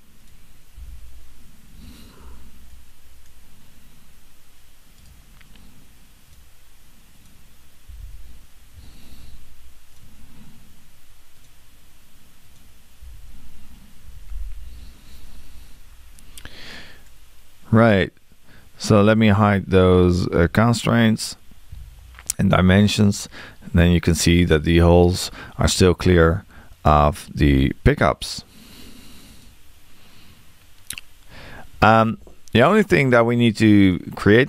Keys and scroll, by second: 0.8 6, 7.9 6, 8.8 Return, 13.0 6.